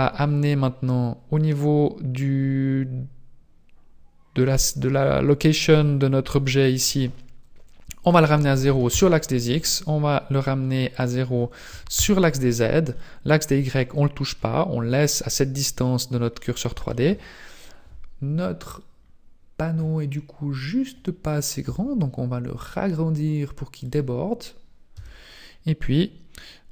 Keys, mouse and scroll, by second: 8.0 click, 10.9 click, 12.9 middle click, 16.4 middle click, 18.4-19.0 scroll down 3, 19.0-19.6 scroll down 1, 21.7 Tab, 21.7 scroll down 1, 22.4 s, 22.6 s, 25.0 Tab.